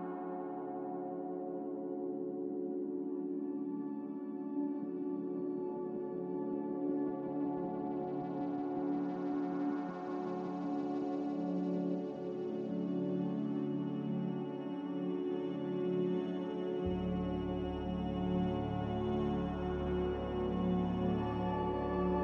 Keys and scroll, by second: 3.9 a, 14.7 s, 17.0 5, 18.4-20.9 typing.